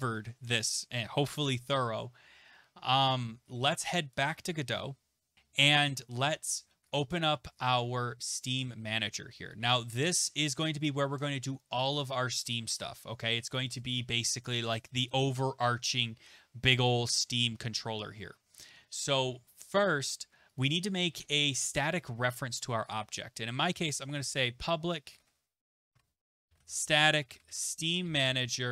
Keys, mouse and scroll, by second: 4.2 click, 6.9 click, 23.7-28.5 typing, 23.9-25.8 drag, 25.9 Tab.